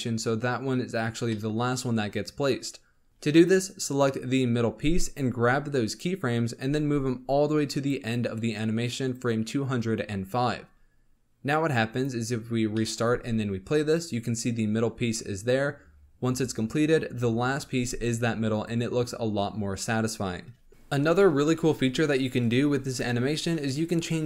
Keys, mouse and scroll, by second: 1.2-1.7 middle drag, 1.7 scroll up 2, 2.9 scroll down 2, 3.1-3.6 shift+middle drag, 3.6 click, 5.1-6.6 drag, 6.6 g, 11.6-12.3 drag, 12.3-12.7 scroll down 3, 12.7-13.0 middle drag, 13.0 space, 15.0 scroll up 1, 17.7 space, 18.0 scroll up 2, 20.7-23.1 middle drag.